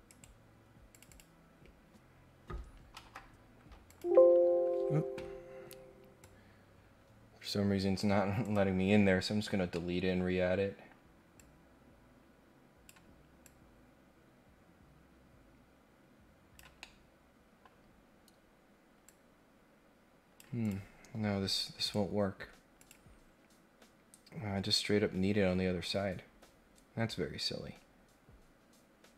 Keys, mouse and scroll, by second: 0.1 right click, 0.9 click, 2.9 Delete, 3.9 click, 6.2-8.0 drag, 8.4 click, 9.7 middle click, 10.2-10.7 scroll down 1, 10.8 scroll down 1, 11.4-12.9 drag, 13.4-16.6 drag, 16.8 middle click, 18.0 scroll up 1, 18.1 scroll down 2, 18.3-18.6 scroll up 2, 19.0-20.4 drag, 20.6 click, 21.0 scroll down 1, 21.8 right click, 22.8 click, 27.1 scroll down 1, 27.6-28.2 scroll down 1.